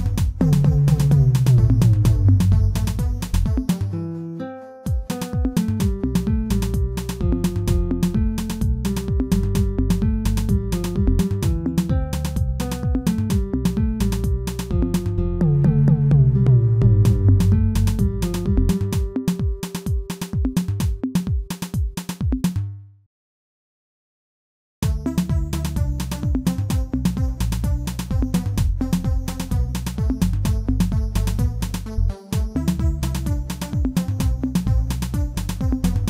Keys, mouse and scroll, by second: 3.7 shift+middle click, 4.2 e, 15.9 shift+middle click, 16.5 e, 20.9 shift+middle click, 21.5 e, 23.7 scroll down 3, 24.0 shift+middle click, 24.6 e, 28.5 middle click, 28.9-30.0 scroll up 2, 30.0 KP_1, 30.4-30.8 scroll up 2, 30.8 shift+middle click, 31.3 e.